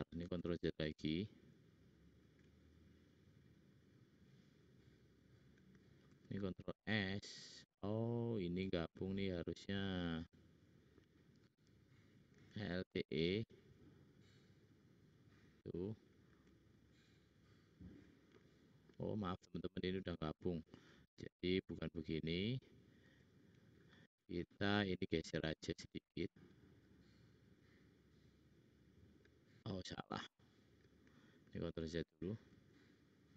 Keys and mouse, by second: 0.6 ctrl+z, 1.1 ctrl+z, 1.3 ctrl+z, 6.2 ctrl+z, 6.9 ctrl+z, 9.0 click, 9.1 click, 10.0 middle click, 10.5 middle click, 12.5 alt+e, 16.2 alt+e, 21.0 ctrl+z, 21.3 ctrl+z, 21.5 ctrl+z, 23.0 ctrl+z, 31.4 ctrl+z, 32.4 ctrl+z, 32.5 ctrl+z.